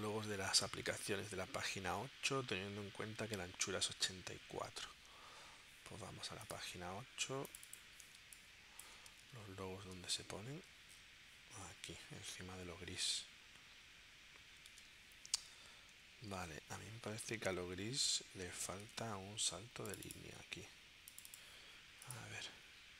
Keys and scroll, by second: 8.2 space, 9.3 super+Tab, 14.7 super+Tab, 16.4 super+Tab, 19.4 super+Tab.